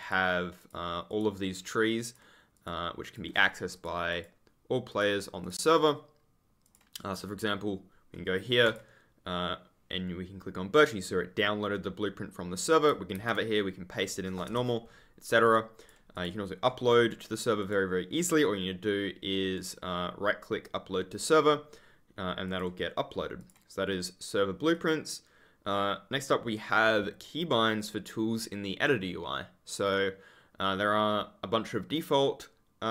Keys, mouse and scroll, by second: 1.3-1.7 scroll down 1, 2.0 click, 8.6 click, 13.1 ctrl+v, 14.4 BackSpace, 15.7 click, 16.8 scroll up 1, 17.5 click, 19.5 right click, 22.4 click, 24.6 click.